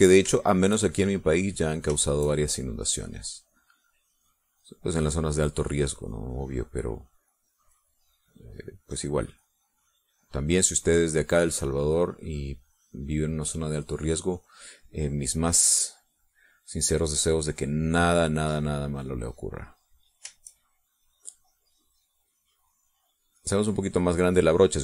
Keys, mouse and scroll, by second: 1.8-3.0 drag, 3.3-5.4 drag, 6.6-14.8 drag, 15.0 middle click, 15.9 middle click, 16.7 middle click, 16.8 click, 18.9-21.2 drag, 21.6-24.8 drag.